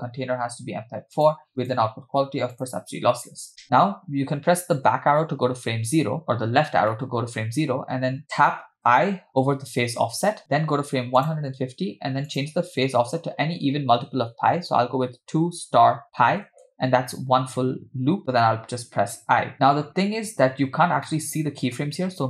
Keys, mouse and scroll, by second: 1.6-2.7 drag, 4.9 Left, 6.2-6.9 scroll up 4, 6.9 middle click, 8.9 i, 11.3 click, 12.4-16.6 drag, 21.1 middle click.